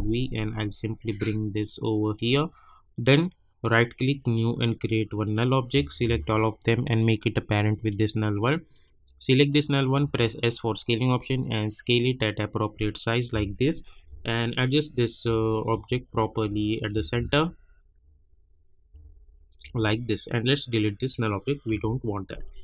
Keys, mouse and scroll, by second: 0.1-3.6 drag, 3.6 right click, 4.2 click, 5.3 click, 5.9 ctrl+a, 6.9-8.7 drag, 9.9 s, 10.8-14.0 drag, 14.0 Left, 15.7 Down, 16.9 Left, 20.7 click.